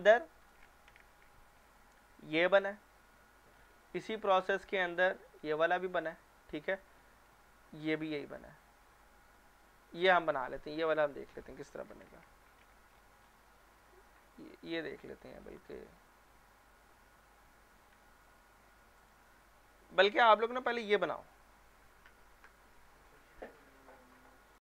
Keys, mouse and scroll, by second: 0.4 click, 1.0 ctrl+f, 12.1 ctrl+f, 12.9-13.6 scroll down 1, 13.6-15.3 scroll up 1, 15.3 scroll down 1, 16.0-18.0 scroll up 1, 18.3 shift+middle click, 19.0 click, 24.5 click.